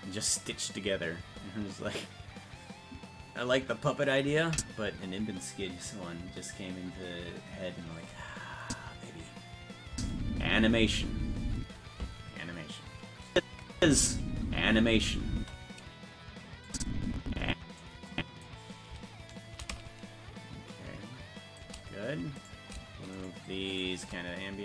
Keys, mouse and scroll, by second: 4.5 click, 8.6 click, 9.9 space, 13.3 click, 16.7-17.8 drag, 18.1 click, 19.4-21.6 shift+drag, 22.5 right click, 23.2 shift+right click.